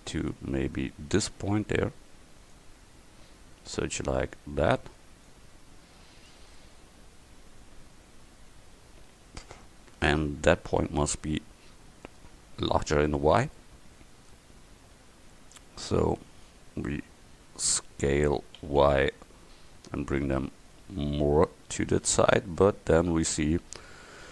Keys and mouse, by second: 2.6-5.4 drag, 6.6 middle click, 7.5 middle click, 12.2 middle click, 13.8-15.3 middle drag, 18.7 s, 23.1-24.3 middle drag.